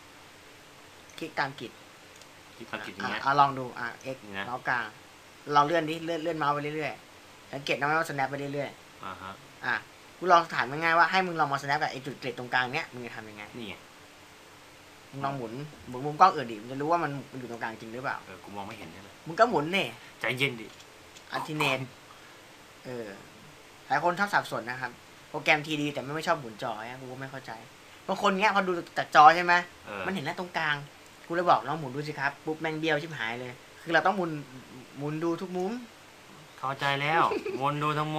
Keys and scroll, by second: 9.6 x, 29.7 x, 35.5 x.